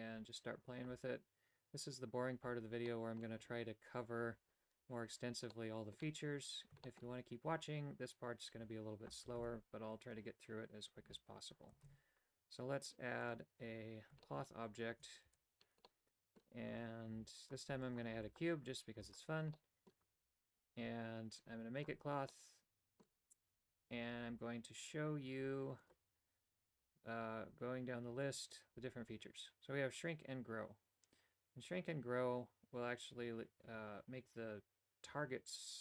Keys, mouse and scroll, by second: 2.8 middle click, 5.5 middle click, 6.8 shift+middle click, 9.3 shift+a, 11.8 shift+a, 14.3 shift+middle click, 15.2 alt+g, 15.8 middle click, 16.7 Tab, 17.1 w, 17.7 w, 18.1 w, 18.9 w, 19.5 middle click, 20.0 Tab, 22.3 middle click, 25.9 click, 30.0-35.8 drag.